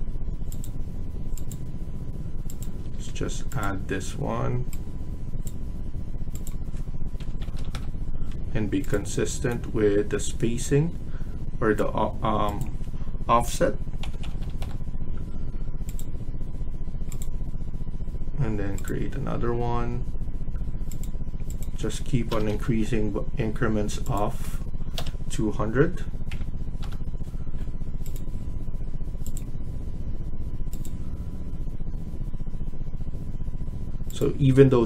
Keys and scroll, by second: 2.5 Escape, 2.8 Escape, 6.8-8.0 typing, 8.2 Escape, 13.6-14.8 typing, 22.2 BackSpace, 22.4 BackSpace, 24.9 BackSpace, 26.2-26.7 typing, 34.2 Escape.